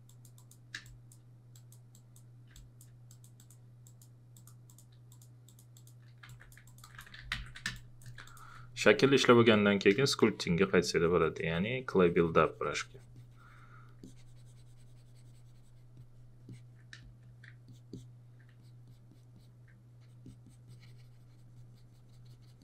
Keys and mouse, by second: 0.8 space, 2.5 click, 6.9-7.9 typing, 7.8 click, 8.3 alt+click, 9.5 alt+click, 9.9 space, 10.0 click, 17.0 space, 17.5 click, 18.6 alt+click.